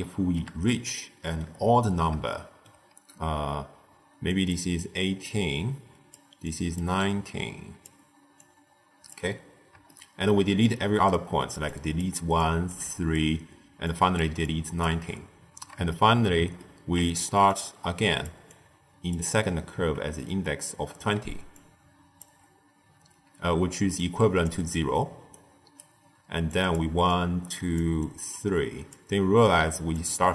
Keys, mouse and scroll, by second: 2.9-4.0 d, 4.2 click, 4.4 d, 4.5 d, 4.7-6.1 drag, 6.1-9.0 typing, 6.4 click, 7.0 click, 8.3-9.0 drag, 9.8-10.9 shift+middle drag, 10.9-14.9 typing, 11.0 click, 11.6 click, 12.3 click, 12.8 click, 13.8 click, 14.4 click, 15.8-17.2 shift+middle drag, 17.2-19.3 typing, 17.4 click, 18.4 click, 21.1 d, 21.4-22.1 drag, 22.1 d, 22.2 d, 23.7-27.8 typing, 23.9 click, 25.2-25.7 right drag, 26.4 click, 27.0 click, 27.9 click, 28.9-30.3 typing, 29.4 click, 29.9 click.